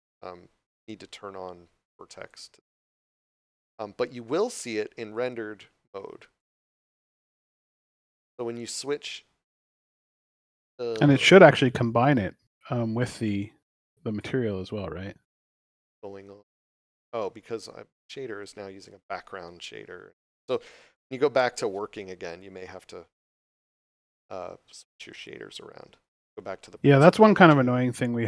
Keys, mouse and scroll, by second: 2.3 click, 8.6 scroll down 1, 9.7 scroll up 1, 10.8 scroll down 1, 12.2 middle click, 18.0 click, 19.0 shift+middle click, 19.5 scroll down 1, 20.2 right click, 20.9 x, 22.7 click, 26.1 click.